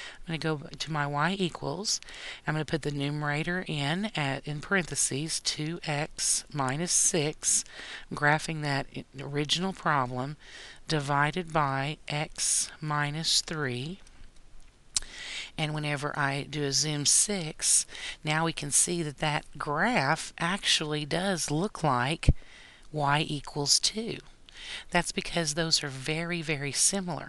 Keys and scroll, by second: 3.3 (, 6.3 x, 7.1 -, 7.7 6, 8.5 ), 12.3 x, 13.1 -, 13.6 3, 14.4 ).